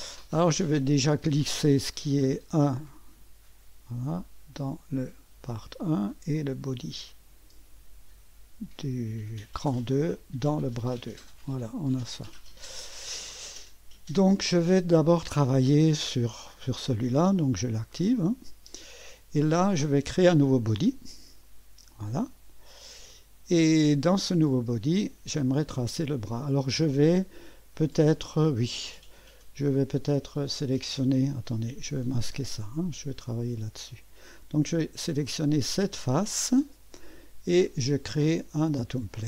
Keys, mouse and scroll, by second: 2.9-5.6 drag, 6.3-10.3 drag, 11.6 click, 16.9-18.6 drag, 17.4-18.5 middle drag, 17.4 right click, 18.1 right click, 21.4 click, 23.1-24.2 drag, 25.0 click, 26.2 click, 32.0 click, 32.4 space, 32.8 click, 33.2 click, 35.2 click, 38.5 click.